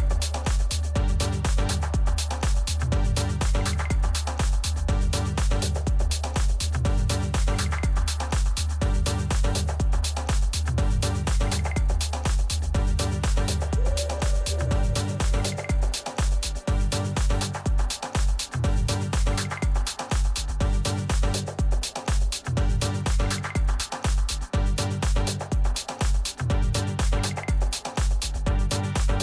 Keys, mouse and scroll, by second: 0.0-1.7 drag, 0.0 a, 1.7-4.1 middle drag, 4.1-6.0 drag, 6.5-9.1 middle drag, 8.7 a, 9.2-10.3 middle drag, 10.3-12.1 right drag, 11.1 a, 13.2 z, 14.5 b, 16.1 b, 17.3-18.7 middle drag, 18.7-20.7 drag, 20.9 middle click, 24.5 a, 25.5-27.4 right drag, 26.6-29.2 drag, 27.6-29.2 middle drag.